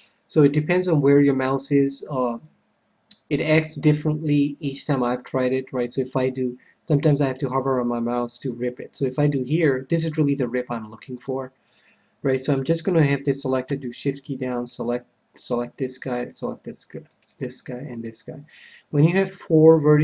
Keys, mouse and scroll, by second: 4.7-6.7 middle drag, 9.5 v, 11.3-12.9 drag, 14.4-19.6 right drag.